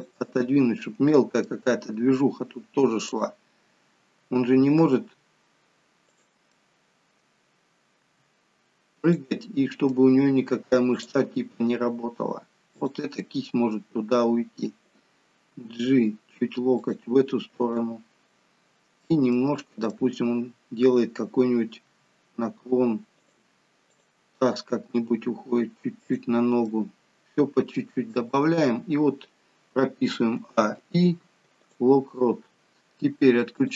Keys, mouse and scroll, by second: 1.4 middle click, 3.1 click, 4.2 g, 6.5 middle click, 8.1 r, 9.4 middle click, 11.2 click, 11.5 r, 13.2 middle click, 15.5 g, 17.6 click, 18.3 middle click, 19.4 middle click, 21.9 r, 24.0 click, 25.1 g, 26.7 middle click, 30.4 a, 32.4-33.0 scroll down 2, 33.6 click.